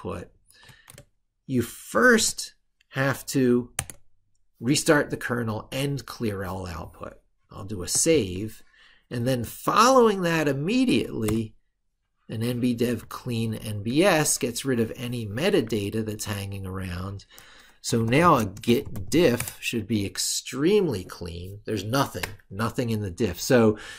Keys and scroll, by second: 1.7 ctrl+shift+r, 9.0 ctrl+super+Right, 13.5 ctrl+super+Left, 15.6 ctrl+super+Right.